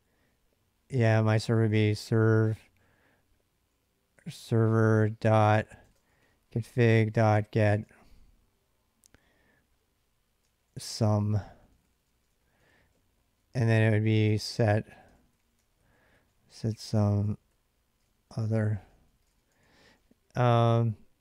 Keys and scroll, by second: 0.8-8.3 typing, 10.2-21.2 typing.